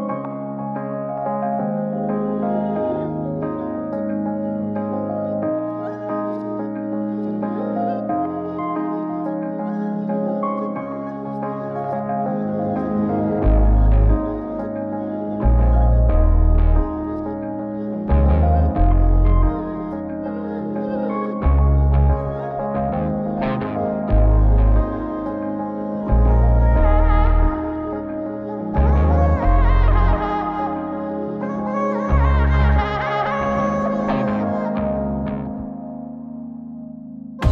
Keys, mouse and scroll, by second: 1.0 click, 2.3 ctrl+g, 5.2 click, 5.8-8.2 drag, 11.0-13.0 right drag, 14.0 shift+a, 17.6-20.1 middle drag, 22.1 click, 24.4-25.7 middle drag, 26.7 middle click, 27.2-28.6 drag, 30.3 ctrl+g, 32.5-35.8 drag.